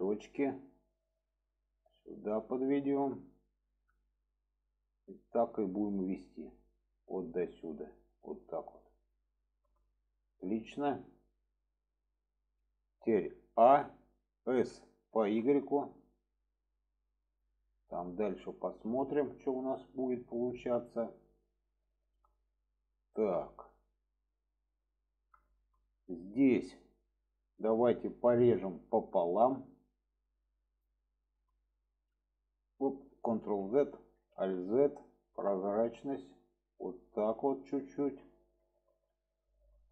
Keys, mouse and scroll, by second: 0.5 click, 1.4-2.2 drag, 2.5-2.8 shift+middle drag, 3.6 click, 4.5-5.9 drag, 6.5-6.8 drag, 7.5-9.0 drag, 9.3 shift+middle drag, 10.2 shift+middle click, 11.4-13.0 middle drag, 14.5 s, 17.6-18.4 middle drag, 18.7 alt+z, 18.9-21.8 middle drag, 22.8 middle click, 23.5-25.1 middle drag, 25.4 shift+middle click, 28.3 click, 29.6 click, 30.7 click, 31.1 shift+middle click, 32.1 drag, 33.7 click, 34.3 alt+z, 35.0 click, 36.0-37.5 drag, 37.8 shift+middle drag, 38.6 shift+middle drag, 39.7 shift+middle click.